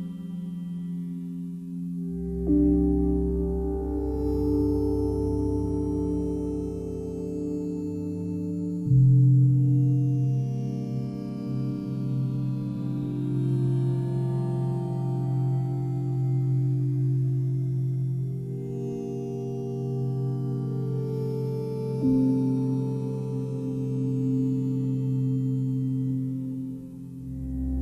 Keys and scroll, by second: 19.8 ctrl+t.